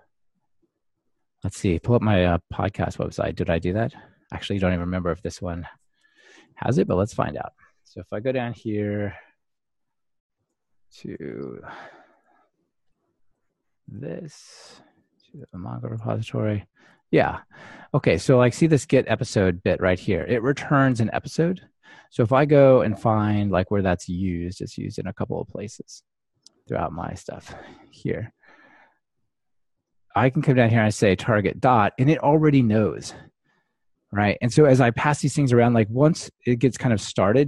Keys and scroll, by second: 25.9 alt+F7.